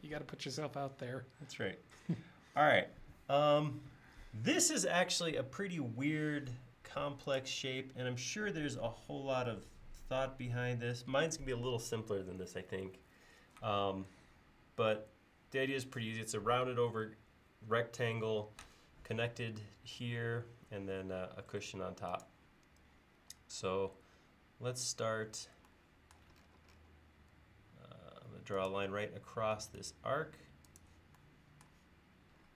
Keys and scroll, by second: 23.2 l.